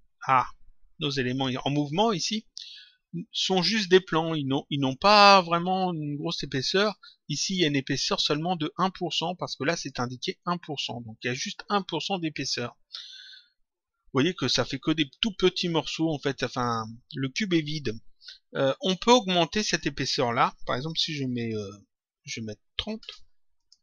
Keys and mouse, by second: 9.6 click, 19.7 click, 23.5 click.